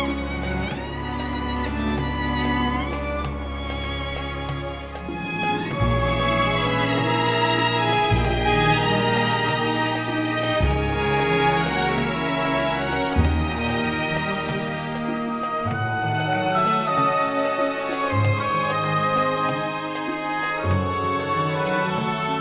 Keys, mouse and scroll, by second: 1.2 1, 2.0 5, 2.6 click, 5.7 click, 6.6 click, 8.3 3, 9.5 0, 10.1 click, 11.9-12.3 scroll up 1, 13.0-13.7 scroll down 2, 14.0 scroll up 2, 14.8-15.1 scroll down 2, 16.1 click, 17.4 click, 18.7 scroll down 2, 19.1 scroll up 2, 19.5-22.4 drag.